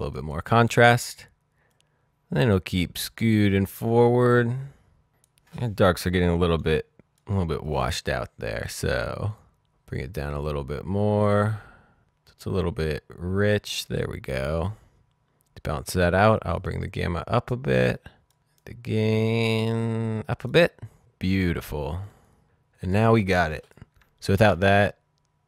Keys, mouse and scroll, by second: 1.7 click, 9.3 click, 15.9 click, 24.4 ctrl+d.